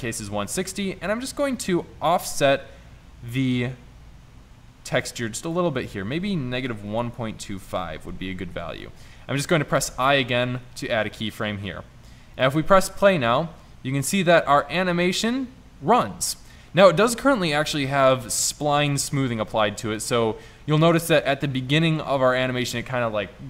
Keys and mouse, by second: 9.9 i, 14.2 middle click.